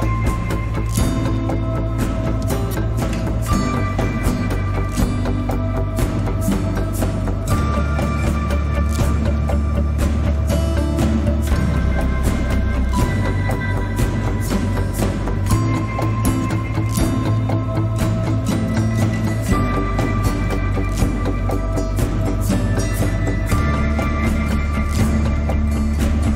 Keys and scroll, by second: 10.9 1, 14.5 Tab, 24.7 g.